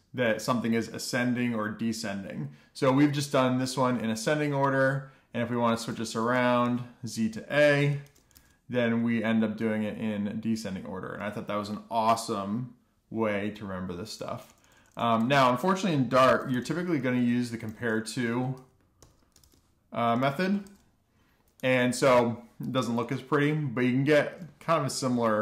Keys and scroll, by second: 7.5-8.6 typing, 9.7-10.4 typing, 10.5 super+s, 16.5-17.0 typing, 18.1-20.7 typing, 19.8 Return, 21.1 Escape, 21.5 alt+shift+f, 22.3 alt+shift+f, 22.7 super+s.